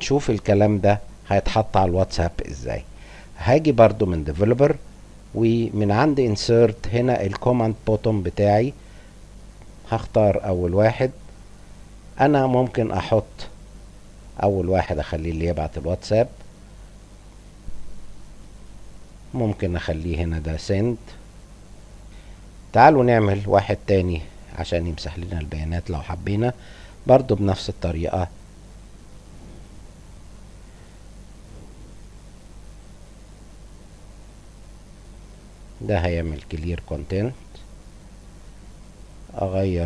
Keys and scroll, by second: 20.3-21.3 typing.